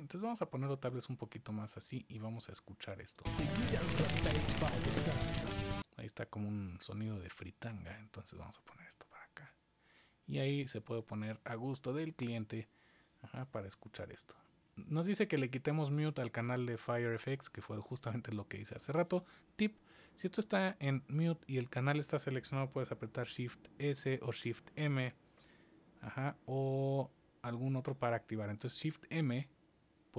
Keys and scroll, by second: 3.1 space, 5.7 space, 23.1 s, 23.7 s, 25.4 m, 27.6 m, 28.2 m.